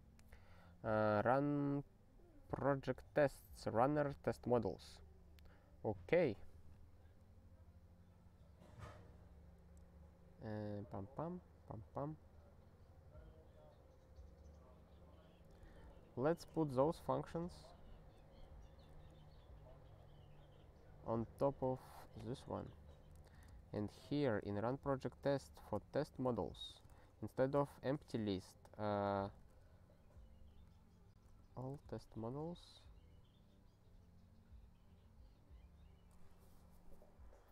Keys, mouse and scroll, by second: 1.8 scroll up 3, 2.9 click, 3.1 click, 4.4 click, 4.5 click, 9.3-10.5 scroll down 3, 11.6-13.2 scroll down 3, 13.2-13.7 scroll up 1, 13.7 scroll up 1, 14.4-15.0 scroll down 1, 15.9 ctrl+p, 16.2 ctrl+n, 16.4 ctrl+space, 17.2-18.1 ctrl+n, 18.4 ctrl+p, 18.6 ctrl+p, 18.9 ctrl+w, 19.4 scroll up 1, 21.6 click, 21.7 click, 22.0 Return, 22.2 ctrl+y, 23.1 ctrl+n, 23.3 ctrl+space, 23.4 ctrl+n, 23.8 ctrl+w, 24.2 ctrl+n, 24.4 ctrl+n, 24.7 ctrl+e, 25.0 ctrl+n, 25.2 ctrl+n, 25.8 ctrl+p, 26.0 ctrl+b, 26.1 ctrl+b, 26.4 ctrl+b, 26.7 ctrl+b, 26.9 ctrl+alt+k, 27.8 (, 29.0-32.1 typing, 32.2 ctrl+s.